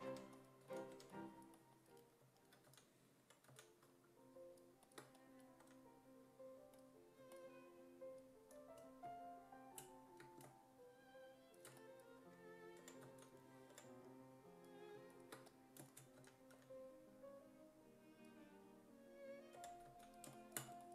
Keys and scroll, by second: 0.0-0.9 typing, 2.7-4.0 typing, 5.6 w, 12.2-13.7 typing, 16.2 w, 16.6 e, 19.6 5, 19.9 s.